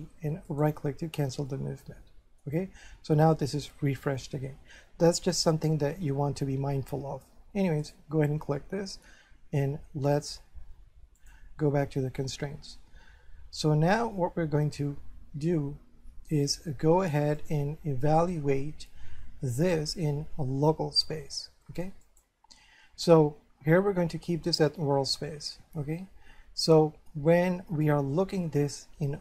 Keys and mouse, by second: 0.5 right click, 1.5 middle click, 7.8 right click, 11.2 click, 17.4 click, 22.0 click.